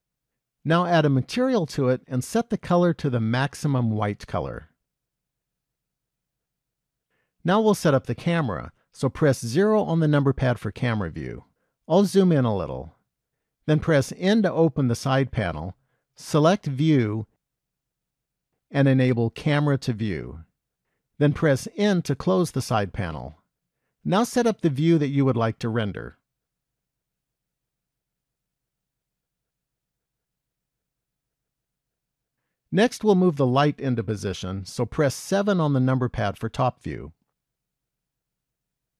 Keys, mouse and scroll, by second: 1.6 click, 3.2 click, 9.5 KP_0, 11.9-14.5 scroll up 3, 14.5 n, 16.8 click, 17.9 click, 20.0 click, 22.3 n, 24.0-26.4 scroll down 8, 26.4 middle click, 28.3 shift+middle click, 32.4 middle click, 34.1 shift+middle click, 35.4 KP_7, 37.0-37.7 scroll down 2, 38.1 shift+middle click.